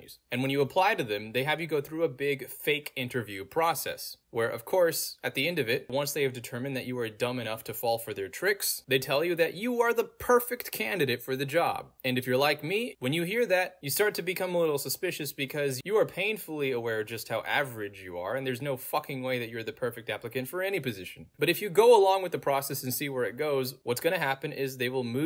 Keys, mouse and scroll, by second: 1.8-2.5 scroll down 2, 2.5 scroll down 1, 3.1 click, 4.0-4.6 scroll down 2, 4.6-5.8 scroll down 1, 6.9 click, 8.2-10.1 scroll down 2, 10.9-13.2 scroll down 2, 13.2 click, 13.6-14.4 scroll down 2, 14.6 click, 16.6-17.5 scroll down 2, 17.5-18.4 scroll down 1, 18.4 click, 19.9-20.8 scroll down 2, 20.8-21.3 scroll down 1, 21.3-22.4 scroll down 1, 22.4-23.9 scroll down 1, 23.9-25.0 scroll down 1.